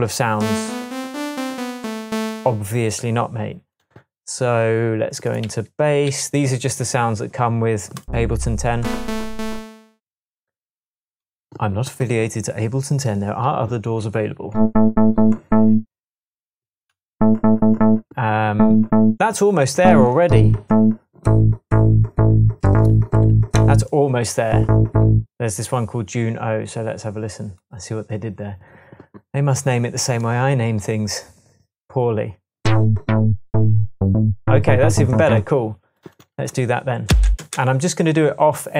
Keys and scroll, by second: 6.1 Right, 37.1 space.